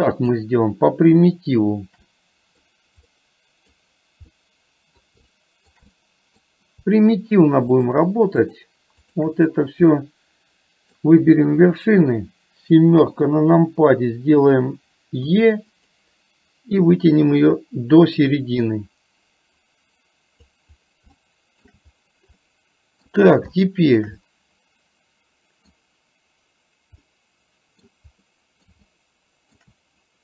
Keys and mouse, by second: 0.2 shift+click, 2.2 middle click, 3.2 middle click, 4.4 middle click, 5.4 shift+middle click, 5.9 middle click, 7.9 shift+click, 8.4 shift+click, 9.1 shift+click, 9.9-11.1 middle drag, 13.1 KP_7, 15.4 e, 16.9-20.6 drag, 21.2 shift+middle click, 22.4 middle click, 23.6 shift+middle click, 24.3-25.8 middle drag, 27.1 middle click, 28.3 middle click, 28.9 shift+middle click.